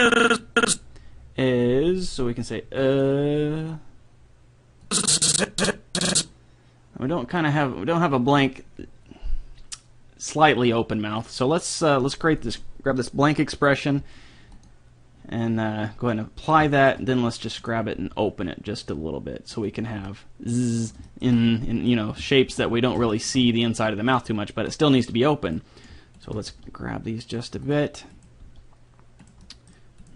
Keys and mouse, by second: 2.9-6.7 drag, 11.2-14.1 drag, 14.5-16.3 drag, 17.6-18.7 right drag, 17.9 g, 18.7 click, 25.5-27.9 right drag, 26.6 g, 28.4-29.6 right drag, 28.4 g, 29.4 click.